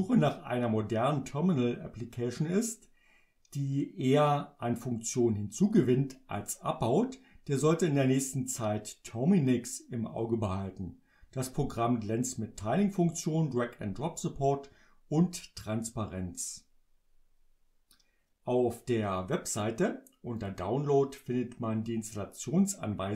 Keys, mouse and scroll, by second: 20.4 click.